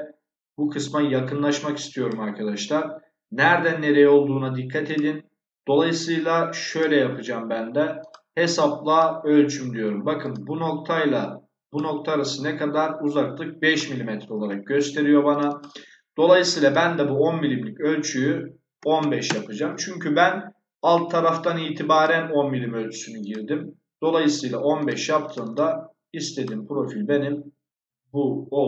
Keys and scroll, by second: 13.9 Escape, 18.7 1, 18.9 5, 19.2 Return.